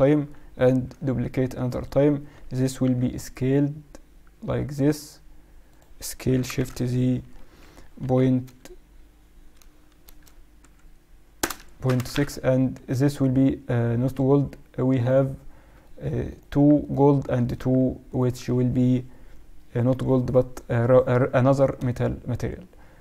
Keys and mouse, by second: 0.6 shift+d, 2.8 s, 6.2 s, 12.8-20.0 right drag, 15.7-17.4 middle drag.